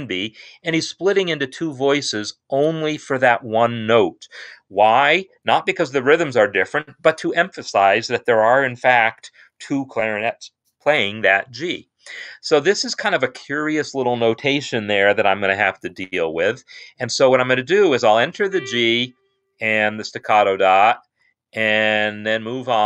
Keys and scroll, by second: 18.4 g, 20.9 shift+s, 22.2 0.